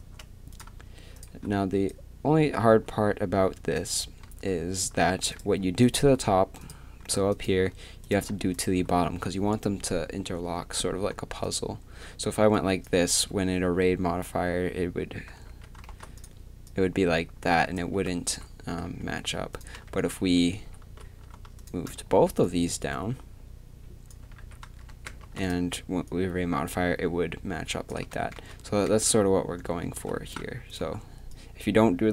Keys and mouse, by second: 0.0 a, 5.1 z, 5.1 a, 5.3-12.5 drag, 15.3 z, 15.3 a, 15.5 a, 15.9 shift+d, 17.9 ctrl+z, 18.3 ctrl+z, 19.5-22.4 drag, 19.9 ctrl+z, 20.2 ctrl+z, 20.5 ctrl+z, 22.1 z, 24.2 a, 24.4 a, 24.9 z, 25.2 shift+d, 28.1 ctrl+z, 28.4 ctrl+z, 30.3-32.1 right drag, 31.3 click.